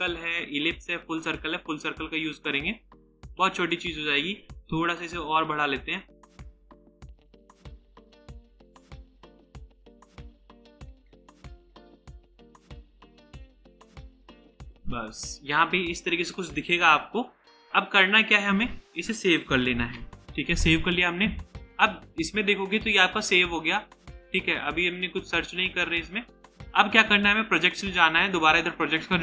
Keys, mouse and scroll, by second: 3.2 right click, 14.2 right click, 19.7 ctrl+s.